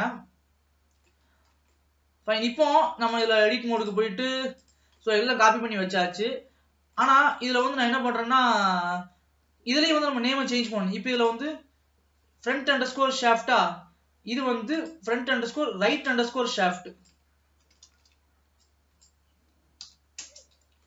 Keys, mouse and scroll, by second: 1.8 ctrl+s, 2.0 middle click, 3.0 scroll up 1, 3.2 click, 4.1-5.2 drag, 5.2-7.6 middle drag, 7.6 click, 8.3-11.3 middle drag, 11.3 click, 14.8 click, 16.0-19.1 drag.